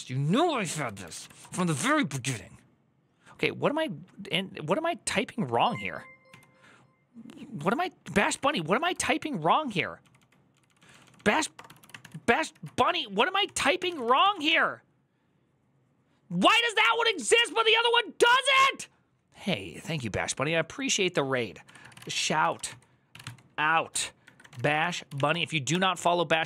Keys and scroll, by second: 1.2 BackSpace, 8.2 Up, 9.8-14.2 typing, 13.2 ctrl+c, 14.3 Return, 16.7-17.5 typing, 23.0-26.0 typing.